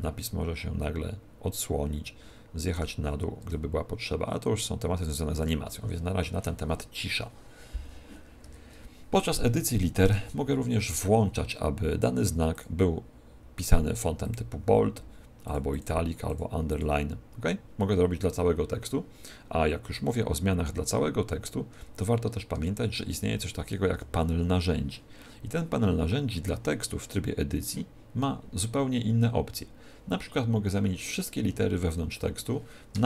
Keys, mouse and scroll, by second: 3.4 shift+click, 8.4 Tab, 9.5 Left, 12.4 click, 14.2 click, 15.4 click, 15.6 click, 16.2 click, 21.6 Tab, 22.5 Tab, 23.8 t, 27.0 Tab, 31.4-33.0 typing.